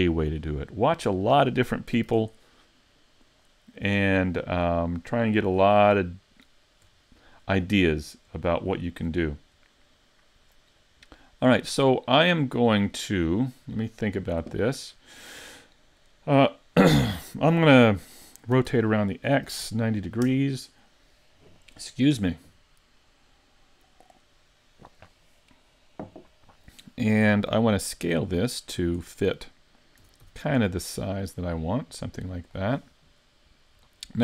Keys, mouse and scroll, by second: 0.3 click, 1.0-2.0 scroll down 2, 2.1 super+z, 3.3 click, 3.8-4.2 scroll up 4, 4.4 shift+middle click, 5.0-5.4 scroll up 2, 5.5 shift+middle click, 6.0 middle click, 7.0 shift+middle click, 7.6 scroll up 2, 8.0 shift+middle click, 9.3 shift+middle click, 11.9 middle click, 18.5 r, 28.0-28.3 scroll down 1, 28.3 middle click, 30.0 s, 32.5 click, 32.9 middle click, 34.0 shift+middle click.